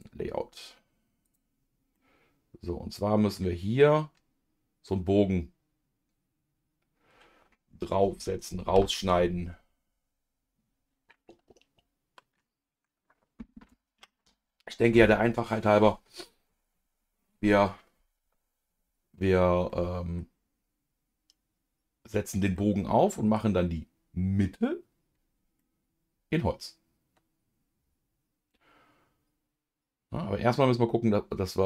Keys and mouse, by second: 2.8 middle click, 19.7 middle click, 22.9 middle click, 25.6-31.6 middle drag.